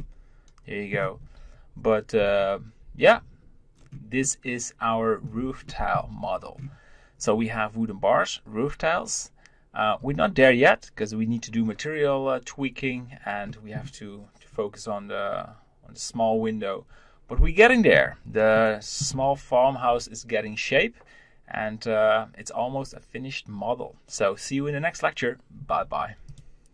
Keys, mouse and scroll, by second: 2.1 z, 3.7-4.2 scroll down 1, 4.2-6.1 middle drag, 6.1-9.5 scroll up 1, 13.4-16.4 middle drag, 18.5-21.5 middle drag.